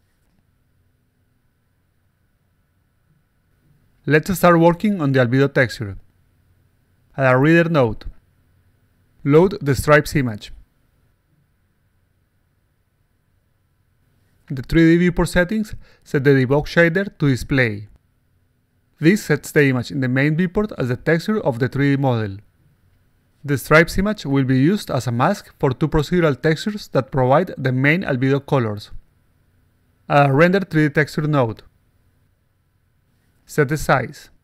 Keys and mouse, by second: 0.4-1.8 alt+drag, 2.7-4.5 alt+drag, 2.7-4.5 alt+right drag, 5.0 click, 6.2 click, 7.3 click, 8.0 click, 8.9 click, 9.8 click, 11.4 click, 11.8 click, 12.0 alt+click, 14.7 click, 15.0 click, 16.1 click, 17.0-17.6 drag, 18.5 click, 20.0 click, 21.8-23.4 alt+drag, 23.7-26.1 alt+drag, 30.5 click, 31.2 click, 33.0 click, 33.6-34.4 typing.